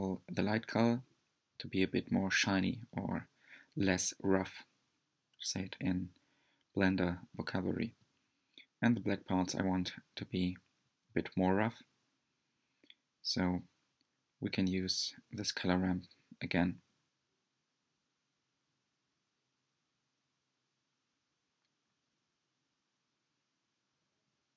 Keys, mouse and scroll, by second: 3.5-6.8 drag, 20.7-21.4 middle drag, 21.4-21.8 scroll up 3, 21.9 middle click, 22.8 scroll down 1.